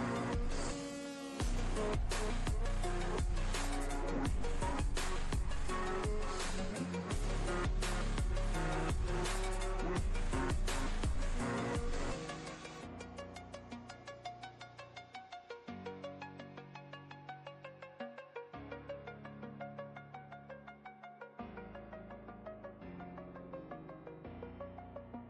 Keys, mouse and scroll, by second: 1.0 right click, 1.7 click, 1.7 k, 5.1 click, 9.0-12.4 drag, 16.1 ctrl+t, 18.4-19.9 alt+drag, 20.8-22.6 drag, 22.8 alt+click, 24.2 alt+click.